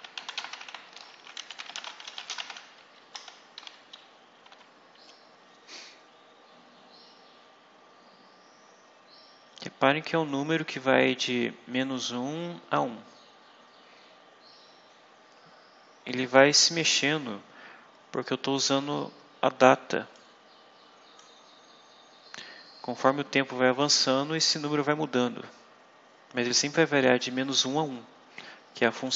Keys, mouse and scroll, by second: 0.0-2.9 typing, 3.5 shift+Left, 4.4 ;, 20.0-21.3 drag, 28.9 click.